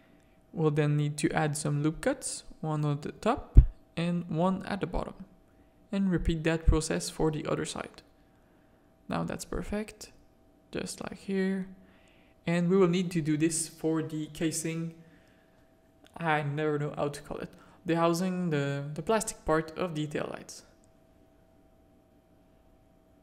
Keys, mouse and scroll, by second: 0.7 click, 1.6 Tab, 2.0 ctrl+r, 4.2 ctrl+r, 6.4 Tab, 6.7 click, 6.8 Tab, 7.3 ctrl+r, 9.7 ctrl+r, 11.9 Tab, 12.2 alt+a, 12.9 z, 15.0 z, 15.4 click, 15.9 Tab, 17.1 1, 17.6 z, 17.8 a, 18.3 click, 19.0 z, 19.4 g, 21.4 z, 21.7 a, 22.6 click.